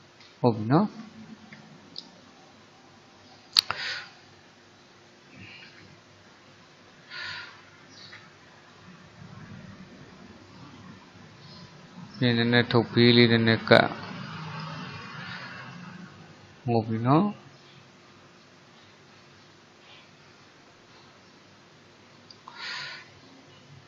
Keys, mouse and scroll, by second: 1.2-3.9 shift+middle drag, 3.9 click, 5.7 ctrl+z, 8.1 alt+shift+click, 8.8 click, 16.0 click, 16.5-19.6 middle drag, 23.0 middle click.